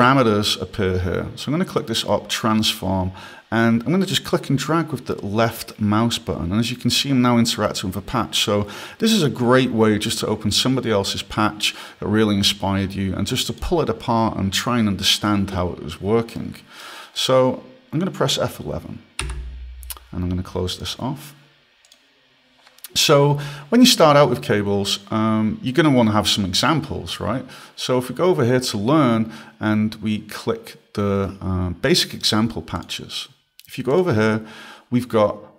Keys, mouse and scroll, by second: 2.1 click, 4.5 click, 16.2 scroll, 16.7 right click, 17.5 click.